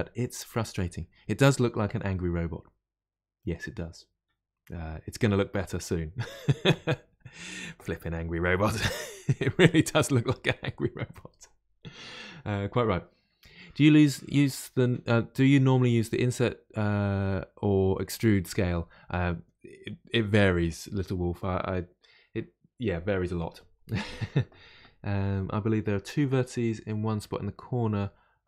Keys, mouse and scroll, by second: 9.3-12.4 middle drag.